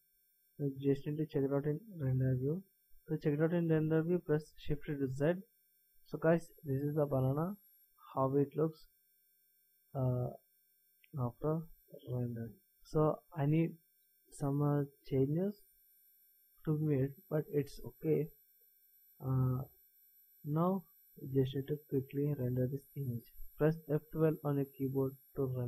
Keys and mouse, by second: 5.0 shift+z.